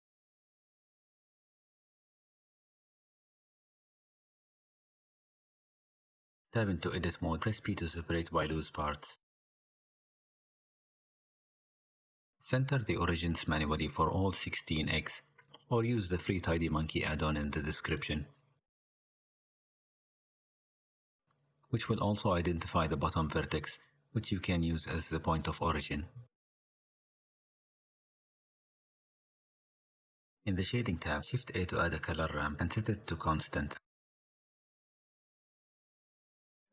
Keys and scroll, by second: 6.4 Tab, 7.0 p, 8.2 Tab, 9.0 r, 11.1 n, 11.1 a, 11.5 n, 16.2 r, 17.0 r, 31.0 shift+a.